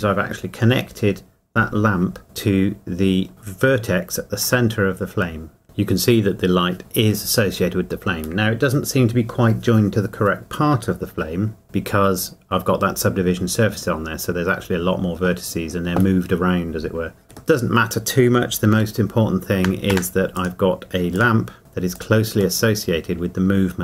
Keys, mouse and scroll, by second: 4.4 Tab, 5.6 middle click, 11.1 Tab, 17.5 middle click, 18.7 g, 19.9 Escape, 21.6 g, 21.9 click, 22.6 middle click.